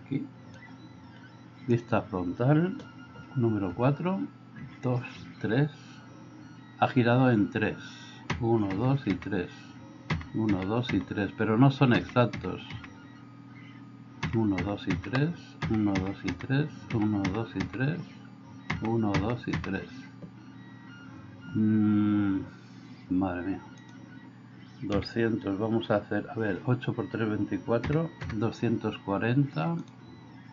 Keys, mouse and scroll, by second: 1.7 click, 3.6 KP_4, 4.6 KP_4, 5.2 KP_4, 8.3 KP_4, 8.7 KP_4, 9.1 KP_4, 10.2 KP_4, 10.5 KP_4, 10.9 KP_4, 12.0 KP_4, 12.4 KP_4, 12.8 KP_4, 14.2-17.6 typing, 18.7 KP_4, 19.2 KP_4, 19.6 KP_4.